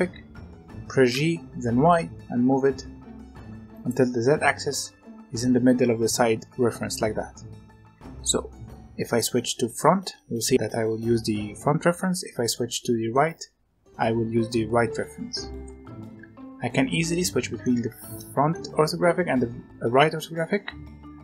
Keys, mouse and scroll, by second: 0.2-1.1 scroll down 1, 1.1 g, 7.2-8.2 scroll down 2, 8.2-10.5 middle drag, 11.6 scroll up 1, 11.9-14.9 middle drag, 15.1-15.6 scroll up 1, 15.6-21.1 middle drag.